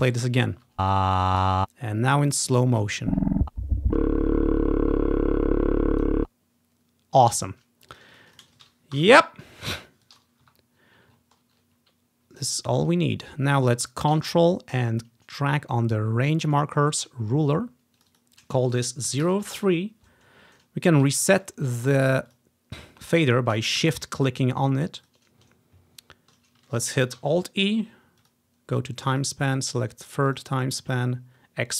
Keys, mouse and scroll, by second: 0.4-1.5 drag, 0.7 space, 1.7 space, 2.9-6.2 drag, 6.6 click, 8.1-11.3 drag, 9.1 Delete, 10.6 Delete, 11.3-12.1 ctrl+scroll down 1, 14.9-19.7 ctrl+drag, 19.2-20.9 typing, 19.7 Return, 22.2-23.6 shift+drag, 24.3-26.2 shift+drag, 25.7-26.4 scroll up 1, 27.3 alt+e, 28.3-29.7 drag, 29.6 typing, 30.4 click.